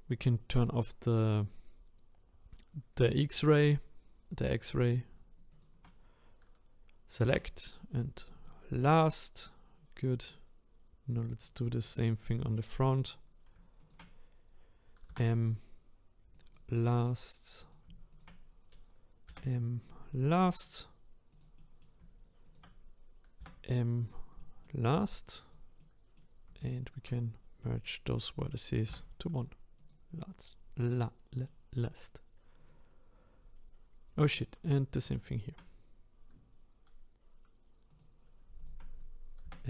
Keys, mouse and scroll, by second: 0.5-3.6 drag, 5.6 shift+click, 8.4 m, 9.8-10.3 scroll down 2, 10.3-13.1 middle drag, 13.1 click, 20.1-21.4 middle drag, 21.4 click, 21.6 middle click, 22.5 shift+click, 24.1 m, 24.4-25.5 middle drag, 25.5 click, 25.8-26.9 middle drag, 26.9 shift+click, 27.6-29.9 middle drag, 30.5-31.1 scroll down 2, 31.1-32.7 middle drag, 32.7 click, 33.6-34.4 scroll up 5, 34.4 click, 35.1 shift+click.